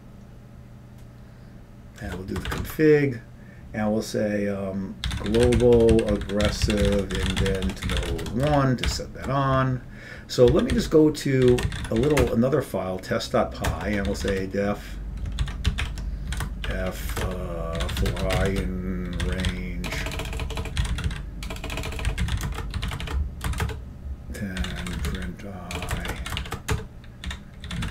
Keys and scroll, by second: 2.1 Return, 2.5 typing, 2.7 Tab, 4.9-9.1 typing, 10.6 ctrl+x, 11.0 ctrl+f, 11.0-12.8 typing, 13.8 Return, 14.2-15.0 typing, 15.6 ctrl+x, 15.6 ctrl+=, 15.7 ctrl+x, 16.1 ctrl+=, 16.5-24.2 typing, 17.3 Return, 25.4-27.3 typing.